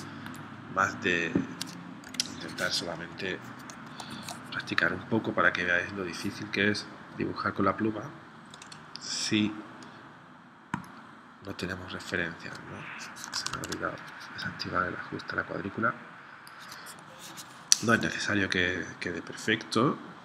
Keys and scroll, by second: 2.1 p, 13.6 super+z.